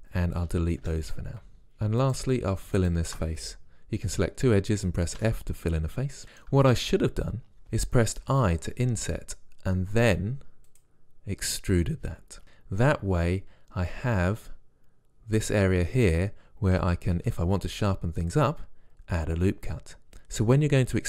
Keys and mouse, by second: 0.9 Delete, 1.6 ctrl+Tab, 2.1-4.7 drag, 5.2 f, 8.3 i, 11.8 e, 14.3 click, 14.5 middle click, 14.7-17.2 drag, 17.2 ctrl+r.